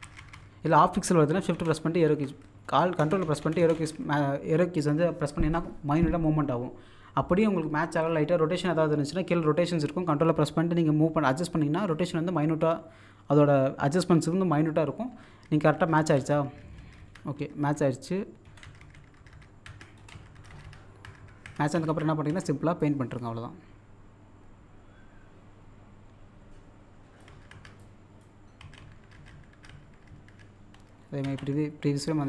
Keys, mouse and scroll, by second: 1.5 shift+Left, 2.7 ctrl+Right, 18.5 Right, 20.0 Down, 20.9 scroll up 1, 21.6 scroll down 1, 22.0-22.8 typing, 22.8-27.3 drag, 27.8 click, 28.4 scroll down 1, 30.5-31.2 scroll up 1, 31.2 z, 31.7-32.2 scroll down 1.